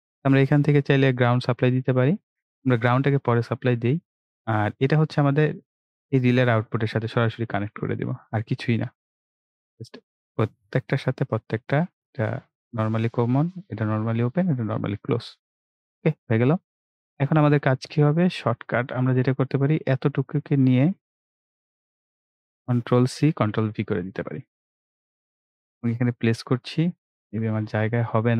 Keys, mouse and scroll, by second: 0.0 click, 1.3 right click, 2.2-7.4 drag, 14.6 right click, 15.7-23.0 drag, 23.0 ctrl+c, 23.3 ctrl+v, 25.7 click, 26.4-26.9 scroll down 1, 27.3-27.8 scroll up 1.